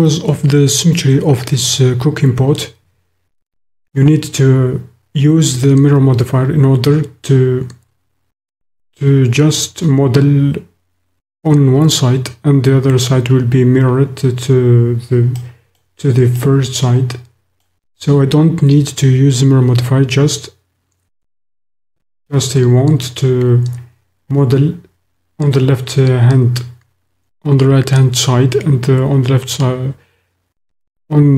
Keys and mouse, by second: 15.5 click, 16.4-17.7 drag.